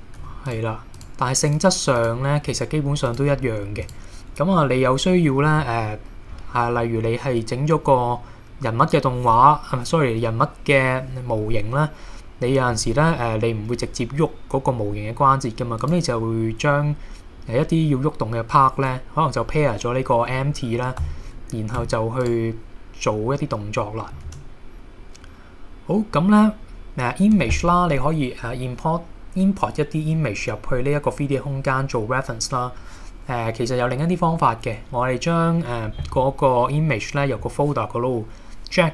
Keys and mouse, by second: 0.2 g, 0.5 drag, 1.5 click, 2.0 click, 2.5 g, 3.1 click, 3.8 click, 4.8-5.9 middle drag, 21.1 a, 21.8 x, 24.3 shift+a.